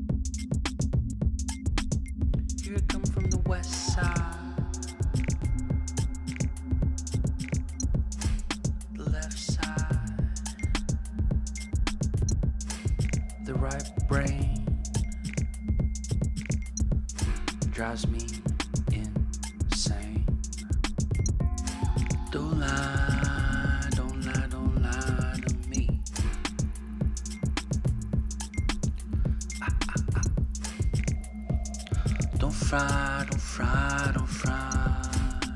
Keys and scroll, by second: 0.0-1.7 typing, 6.5-8.4 Down, 8.8 Down, 8.9 Down, 9.3 Up, 10.6-11.8 Up, 13.2 Return, 15.1 Up, 16.0 Up, 16.2 Up, 19.3 Left, 20.3 Left, 20.6 Left, 20.8 Right, 21.6 Right, 21.8 ctrl+h, 23.5-28.7 typing, 29.5 Left, 29.6 Left, 31.1 Right, 31.6 BackSpace, 31.9 d, 32.2 Right, 32.3 Right, 33.0-34.3 typing.